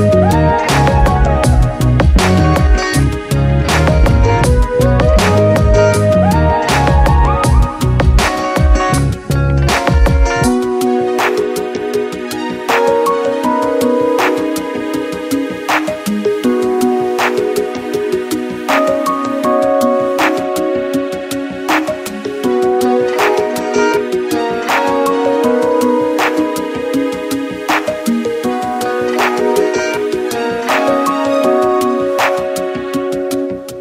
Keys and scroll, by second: 0.0 ctrl+z, 3.8 space, 5.5 space, 8.1 space, 9.3 space, 11.3 space, 18.0 ctrl+z, 23.0 Return, 26.4 ctrl+t, 28.9 Return.